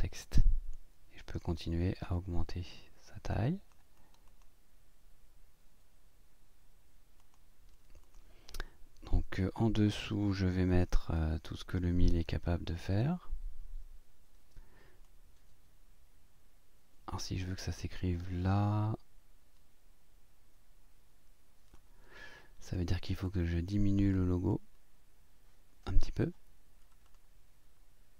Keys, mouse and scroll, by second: 1.4-3.9 drag, 7.2 click, 8.0 click, 9.6-10.6 drag, 10.7 click, 11.2-13.2 drag, 14.1 ctrl+scroll down 1, 15.1-22.0 drag, 22.6 click, 23.3 click, 24.5-26.3 drag, 27.1 right click.